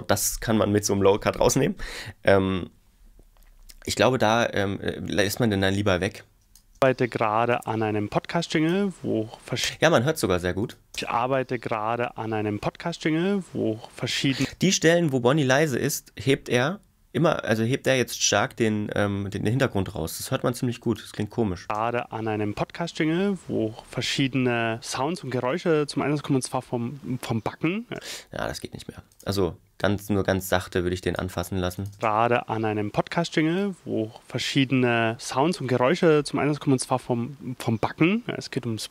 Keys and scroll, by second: 6.8 space, 9.6 space, 10.9 space, 14.4 space, 21.7 space, 27.9 space, 31.9 space.